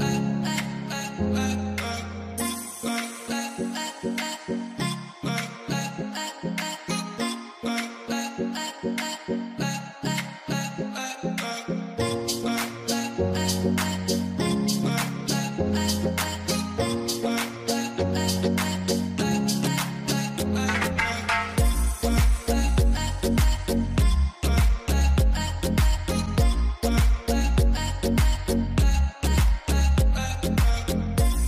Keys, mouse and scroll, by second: 0.7-4.9 scroll up 1, 6.6 alt+w, 12.7 F10, 13.3 KP_2, 13.5 KP_0, 13.6 KP_0, 13.7 Tab, 14.0 KP_1, 14.3 Tab, 18.7 middle click, 22.1 right click, 23.7 right click, 25.1 alt+w, 30.1 right click.